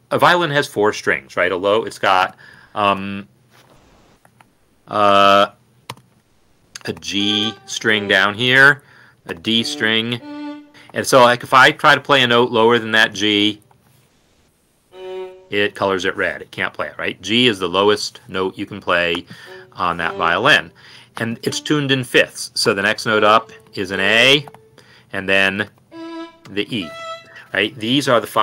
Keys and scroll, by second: 2.5 b, 2.9 b, 4.5 Escape, 4.5 typing, 5.9-6.9 typing, 7.6 ctrl+Down, 9.3-11.3 typing, 10.3 ctrl+Up, 14.1 Down, 14.7 Down, 19.9 Up, 22.3 Right, 24.6 typing, 25.8 typing, 26.8 ctrl+Up, 27.0 Escape.